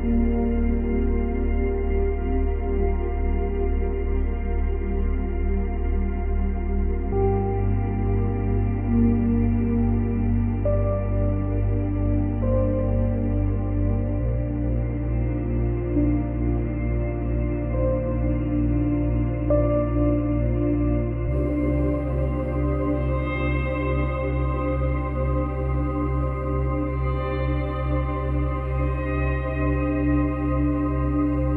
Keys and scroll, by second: 5.2 space, 7.8 space, 10.9 ctrl+z, 14.4 space, 16.5 space.